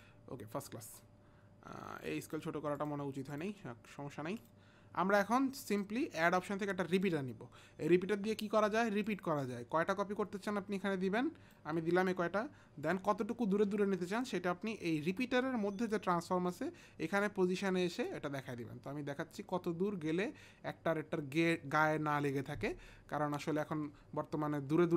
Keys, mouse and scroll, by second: 0.0 click, 2.3 click, 2.8 click, 3.3 click, 6.4 click, 6.9 click, 10.4 click, 12.8 click, 18.1 click.